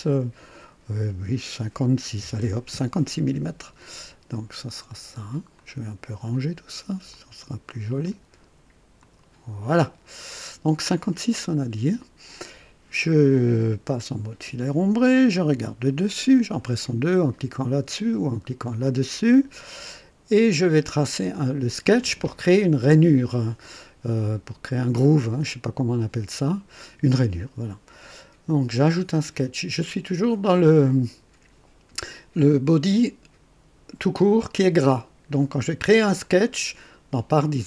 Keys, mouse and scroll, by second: 2.2 KP_5, 2.4 KP_6, 2.7 KP_Enter, 5.6-6.3 drag, 7.1-8.3 drag, 9.0-9.7 drag, 11.4 click, 12.6 scroll down 1, 14.3 &, 15.5 typing, 18.7 click, 19.4 scroll up 1, 20.0-21.3 right drag, 29.8-30.1 scroll up 1, 30.3 scroll down 2.